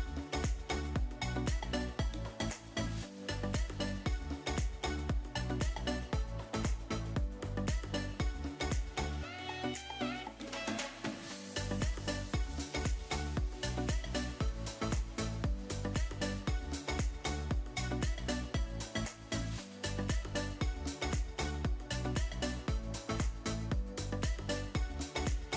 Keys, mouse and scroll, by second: 1.6 g, 1.7 z, 2.7 click, 3.1 middle click, 5.0 e, 5.6 click, 6.0 middle click, 6.7 click, 7.1 e, 7.7 click, 8.1 middle click, 9.1 shift+middle click, 9.7 middle click, 11.4 click, 17.4 alt+shift+click, 18.5-19.9 middle drag, 21.3 ctrl+e.